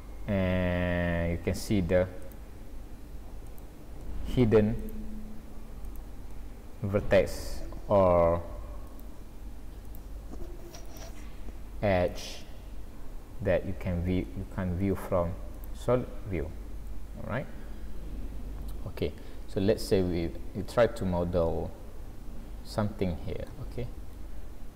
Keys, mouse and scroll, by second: 2.2 click, 3.5 click, 4.0 middle click, 4.8 click, 5.9 click, 6.3 middle click, 8.9 click, 9.9 click, 10.9 click, 12.1 click, 12.4 middle click, 14.9 z, 18.7 middle click, 24.2 scroll down 4.